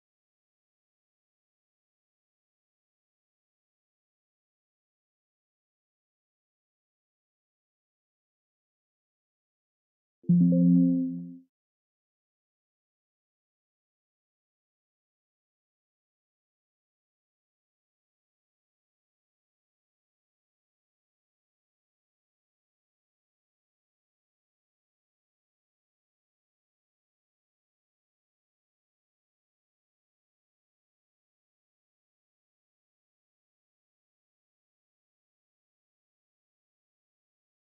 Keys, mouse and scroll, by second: 2.5 click, 6.4 click, 9.4 click, 11.0 click, 12.6 click, 13.2 click, 16.6 click, 19.9 click, 22.1 click, 26.0 click, 27.5 right click, 28.2 click, 30.0 ctrl+z, 30.6 ctrl+z, 31.3 click, 33.5 alt+Tab, 35.1-36.1 scroll, 36.1 click, 36.9 BackSpace, 37.1 2, 37.3 7.